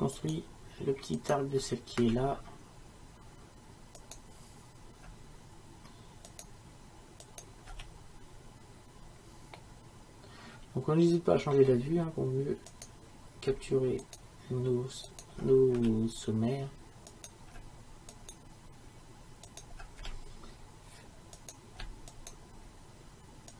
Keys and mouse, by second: 2.1 f, 5.9-9.2 right drag, 7.8 f, 9.5 middle click, 10.8 middle click, 12.7-15.8 right drag, 15.8 f, 20.0 f.